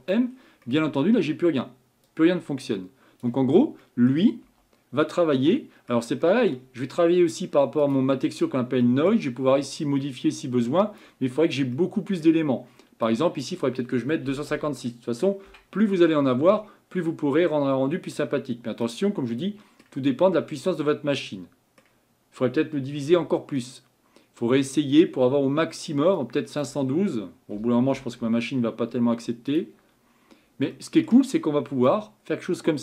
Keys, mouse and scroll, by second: 2.1-4.5 drag, 4.5 m, 10.0-18.9 drag, 19.3-20.1 middle drag, 20.1-20.6 scroll up 5, 20.6-21.1 scroll down 2, 21.1-23.1 middle drag, 23.1 Tab, 23.6-28.3 middle drag, 28.3-30.0 drag, 32.0-32.8 drag.